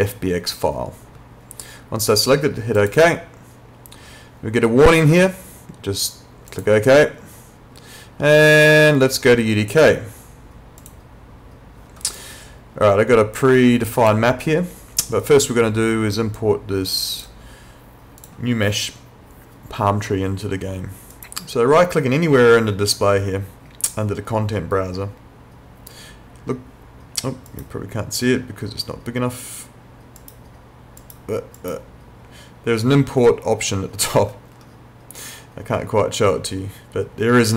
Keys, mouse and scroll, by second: 2.8 click, 6.5 click, 10.8 click, 15.3 click, 18.2 click, 21.1 right click, 27.5 right click, 30.2 right click.